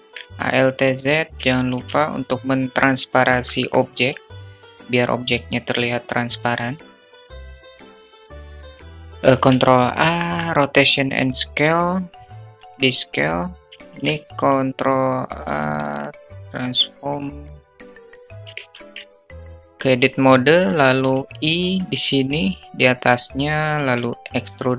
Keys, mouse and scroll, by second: 0.0 alt+z, 0.1 click, 0.8 shift+a, 0.9 shift+click, 1.0 shift+a, 2.8-5.9 drag, 7.3 click, 8.3 alt+middle click, 8.4 Tab, 8.8 s, 9.0 ctrl+a, 12.0 s, 13.7 ctrl+a, 18.0 Tab, 18.6 alt+click, 20.6 i.